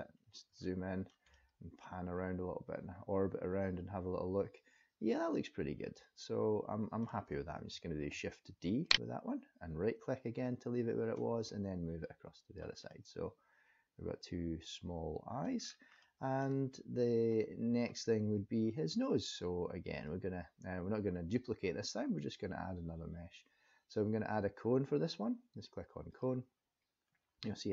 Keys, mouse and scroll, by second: 0.6 shift+middle click, 1.3 middle click, 8.1 shift+d, 10.4 click, 12.9 middle click, 15.5 scroll down 3, 16.0 middle click, 19.9 click.